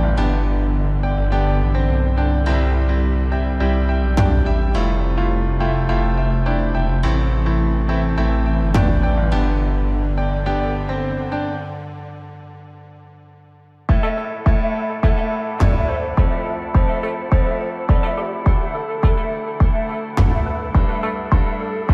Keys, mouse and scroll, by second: 0.6 click, 1.0-2.5 scroll up 3, 2.5-3.4 drag, 3.4-4.0 scroll up 2, 4.0 KP_1, 4.7 Tab, 5.6 click, 7.5 x, 8.7 Tab, 9.6 click, 9.9-10.7 scroll up 1, 11.2 s, 14.1-14.4 scroll down 2, 14.4-15.3 middle drag, 15.3-15.8 scroll up 1, 15.8 KP_1, 16.5-17.0 scroll up 1, 17.0 r, 19.9-20.3 scroll up 2, 20.3 Tab, 21.1 2, 21.5 click.